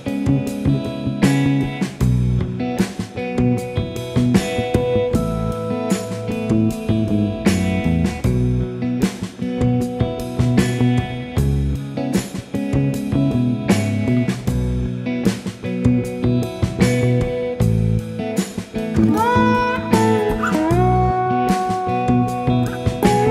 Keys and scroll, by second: 0.6-3.0 typing, 9.5-10.0 typing, 12.7 ctrl+g, 13.9 ctrl+d, 15.2 Page_Up, 16.0 End, 21.8 F1, 22.7-23.3 typing.